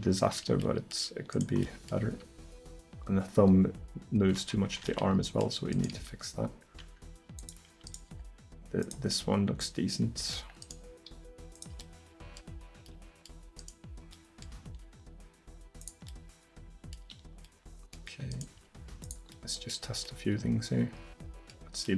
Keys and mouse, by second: 2.1 r, 5.8 right drag, 6.0 r, 8.1 r, 11.2 r, 14.7 r, 18.6 r.